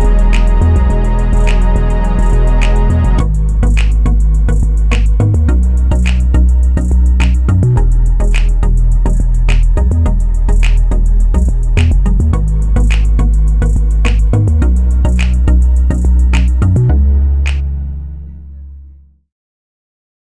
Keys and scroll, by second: 1.2 ctrl+s, 1.4 Return, 1.5 Return, 3.1 ctrl+c, 3.2 ctrl+v, 5.5 z, 6.0 ctrl+c, 6.0 ctrl+v, 9.1 ctrl+c, 9.1 ctrl+v, 20.2 ctrl+shift+c.